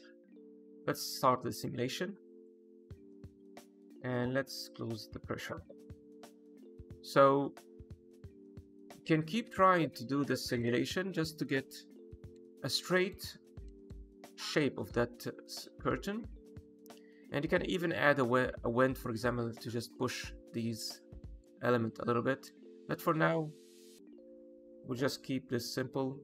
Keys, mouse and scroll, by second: 0.0 scroll down 1, 0.9 middle click, 1.5 space, 5.0 click, 10.1 middle click, 11.2 shift+middle click, 12.2 middle click, 13.0 middle click, 13.4-13.8 scroll down 1, 13.8 middle click, 20.9 middle click, 21.9 middle click, 23.0 middle click.